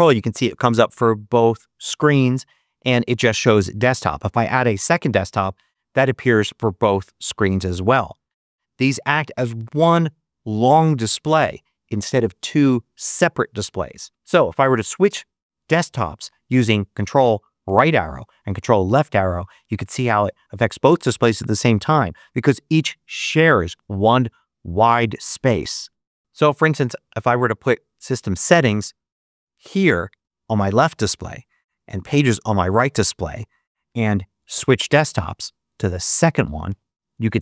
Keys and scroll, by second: 17.5 ctrl+Right, 18.9 ctrl+Left, 36.5 ctrl+Right.